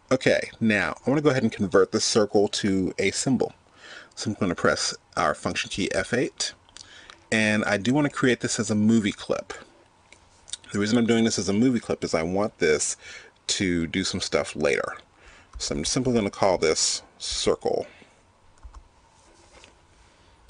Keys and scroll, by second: 1.3 F8, 5.8 F8.